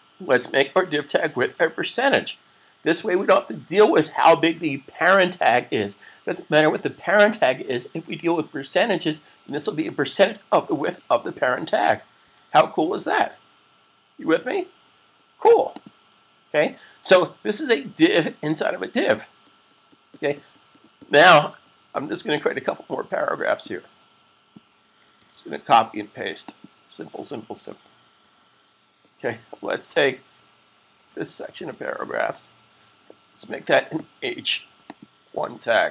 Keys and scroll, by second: 1.4-2.1 typing, 3.5 typing, 12.1 super+s, 25.1 super+c, 28.2 v, 30.6 \.